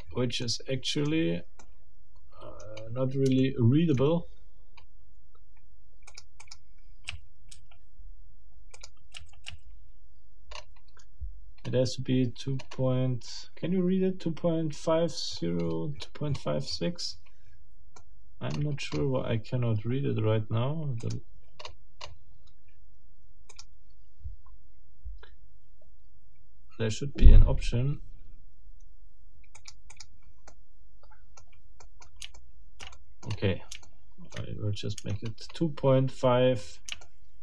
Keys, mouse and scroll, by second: 0.4 middle click, 1.0-1.4 scroll down 2, 1.6 middle click, 1.8 click, 2.1 middle click, 2.8 scroll up 2, 3.4 shift+middle click, 3.9-5.0 shift+scroll up 7, 6.1 middle click, 6.7 middle click, 7.1 a, 8.7 middle click, 9.1 a, 10.5-11.2 scroll up 1, 11.6 scroll up 2, 12.6-12.9 scroll up 2, 13.3 scroll up 2, 15.3-17.4 scroll down 12, 17.9 middle click, 18.5-19.2 scroll up 4, 21.0 middle click, 21.6-22.3 scroll up 4, 23.5 middle click, 24.1-24.5 scroll down 2, 29.6 click, 30.5-31.5 middle drag, 31.8 middle click, 32.3 shift+middle click, 33.3-33.7 shift+scroll up 2, 33.8 shift+middle click, 34.3-34.7 shift+scroll up 2, 35.3-35.7 shift+scroll up 4, 36.6-36.9 scroll up 3, 37.0 shift+middle click.